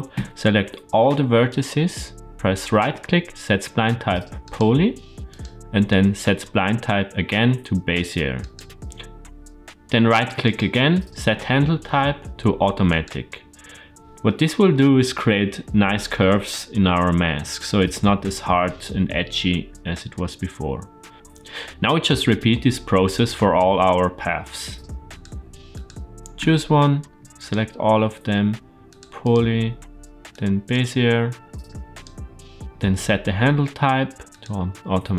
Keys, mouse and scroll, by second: 0.0 a, 1.3-4.4 right drag, 5.2-8.4 right drag, 10.3-12.9 right drag, 16.0-17.2 middle drag, 18.6-21.1 middle drag, 24.9 click, 25.5 click, 26.2 Tab, 27.0 a, 27.2-28.8 drag, 27.2 right click, 29.1-30.6 drag, 29.1 right click, 31.5 a, 31.8-34.3 drag, 31.8 right click.